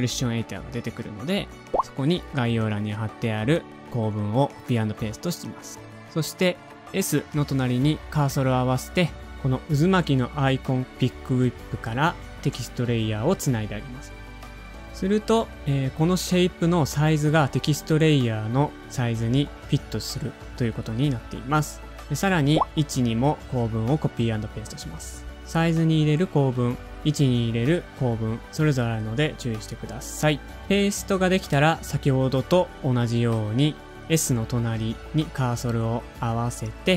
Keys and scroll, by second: 2.2 super+v, 3.4 Return.